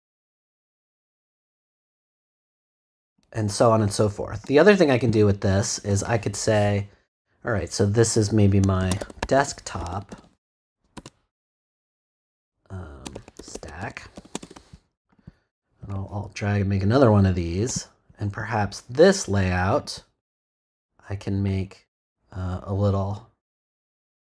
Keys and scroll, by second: 8.5-10.9 typing, 12.9-14.6 typing, 15.2 Return.